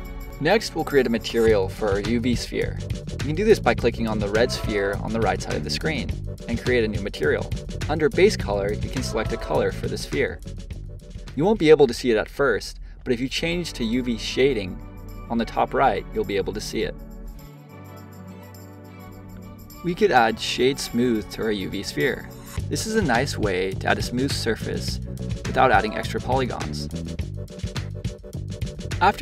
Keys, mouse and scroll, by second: 0.0 click, 2.8 click, 4.6-7.8 drag, 11.4 click, 12.7 click, 15.7 click, 16.6 click, 17.4-18.8 middle drag, 18.8 click, 20.4-23.5 right drag, 24.6 click, 25.5-28.0 middle drag, 28.0 click.